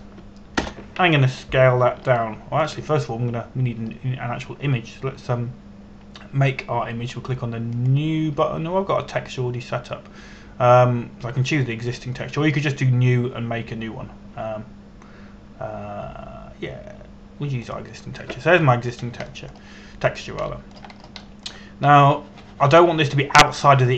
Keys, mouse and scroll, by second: 0.2 KP_4, 0.4 KP_5, 2.3 Return, 3.8 shift+middle click, 9.4 click, 19.3 click, 20.4-20.7 scroll down 1, 20.9 shift+middle click, 22.1 shift+middle click, 22.6 scroll up 1, 22.8 middle click.